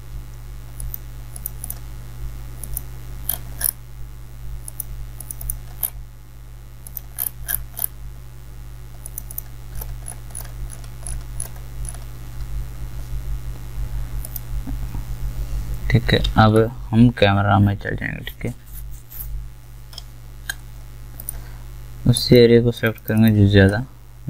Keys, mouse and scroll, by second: 3.4-3.7 scroll up 1, 7.1 scroll up 1, 9.7 alt+scroll down 1, 14.2 ctrl+click, 16.2 ctrl+shift+a, 21.2-24.2 drag.